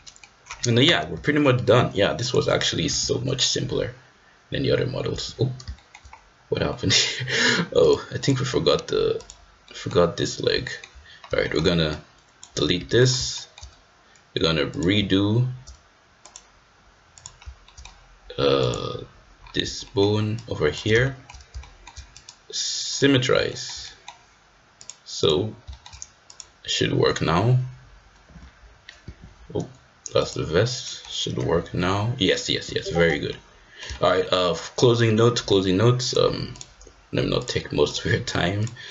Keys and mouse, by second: 3.5 g, 5.7 shift+middle click, 6.6 middle click, 7.8-8.3 drag, 9.6 middle click, 10.6 shift+middle click, 11.4 shift+middle click, 11.9 click, 12.7 x, 13.3 shift+middle click, 14.6 click, 16.2 click, 17.6 shift+middle click, 18.6 click, 19.8 shift+middle click, 20.4 shift+click, 21.0 shift+middle click, 21.6 shift+middle click, 22.1-22.9 right drag, 23.4 shift+middle click, 23.8 middle click, 24.7-25.3 right drag, 25.3 click, 25.6 shift+middle drag, 26.2-27.4 drag, 28.3 g, 30.1-31.4 drag, 31.4-32.8 middle drag, 31.4 g, 33.3-33.8 middle drag, 33.9 shift+middle click, 34.1 middle drag, 34.6 middle click, 36.0-36.6 drag, 37.4-38.0 drag.